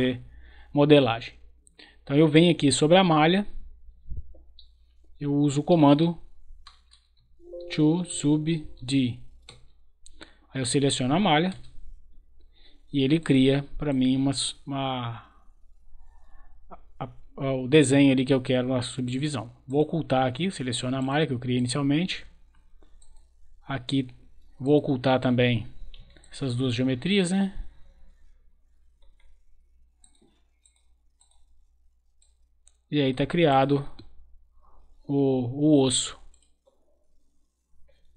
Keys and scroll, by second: 5.6-9.2 typing, 9.4 Return, 11.5 Return.